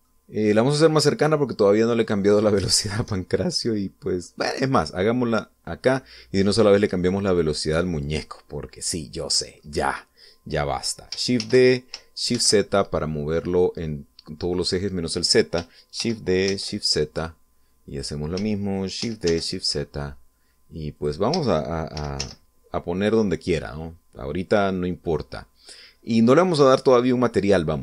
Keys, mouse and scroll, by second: 0.3 middle click, 1.9-3.1 drag, 3.2-3.5 scroll up 1, 3.6-5.3 shift+middle drag, 5.5 click, 6.5 scroll down 2, 7.5 scroll down 2, 7.7 middle click, 8.4-8.9 scroll up 2, 8.9 scroll down 2, 9.1-9.4 scroll up 2, 9.4-10.6 middle drag, 10.6-12.0 scroll up 2, 12.3 shift+d, 13.2 shift+z, 15.4 click, 16.9 shift+d, 17.4 shift+z, 18.8 click, 19.9 shift+d, 20.2 shift+z, 21.9 click, 22.8 shift+d, 23.1 shift+z, 23.9 click, 25.1 scroll down 1, 25.5-26.7 middle drag, 26.8-27.2 scroll up 1, 27.4-27.8 middle drag.